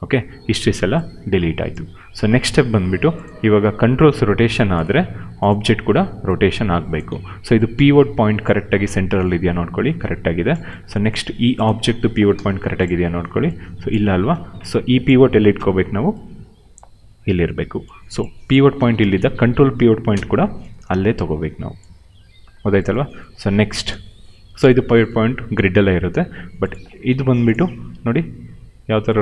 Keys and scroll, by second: 3.3 e, 4.8 ctrl+z, 5.1 q, 7.0 ctrl+z, 9.2 ctrl+z, 12.2 f, 13.9 ctrl+z, 14.2 w, 15.5 d, 18.7 w, 20.0 d, 27.8 e.